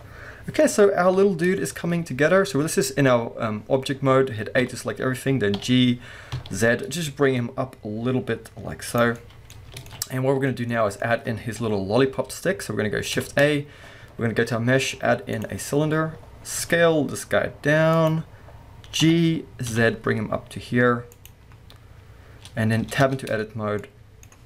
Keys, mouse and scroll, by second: 1.1 KP_1, 1.9-2.8 scroll down 2, 2.8-4.4 scroll up 2, 4.4 scroll up 1, 4.6 a, 9.0 click, 9.2-9.9 middle drag, 9.5 scroll down 2, 9.7 alt+a, 10.5-11.0 middle drag, 11.0-11.6 scroll up 2, 11.6 KP_1, 13.3 shift+a, 15.9-16.6 scroll up 2, 16.6 s, 18.0 click, 19.0 g, 21.2 click, 21.5 scroll up 1, 23.0 Tab, 23.3-23.8 scroll up 1, 23.8-24.4 middle drag.